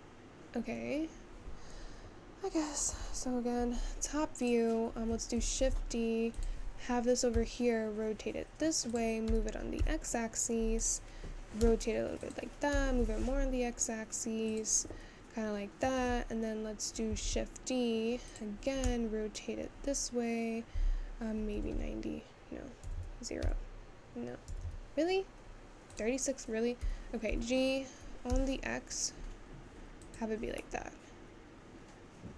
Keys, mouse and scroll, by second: 5.2 `, 8.0 r, 18.3 shift+d, 19.7 r, 32.0-32.3 middle drag.